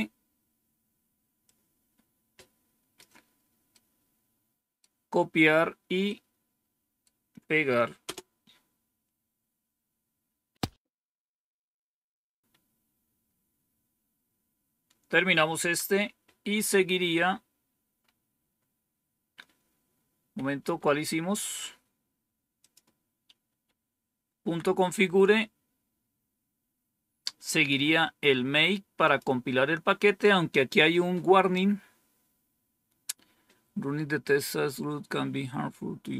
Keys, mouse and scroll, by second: 1.3-2.9 drag, 3.6-5.5 right drag, 5.9-7.7 right drag, 7.9 Return, 12.4 Up, 15.5 End, 20.5 Down, 22.5 click, 23.4 Up, 24.3 Down, 26.1-27.2 scroll down 1, 28.9 click, 31.8-32.5 scroll down 1.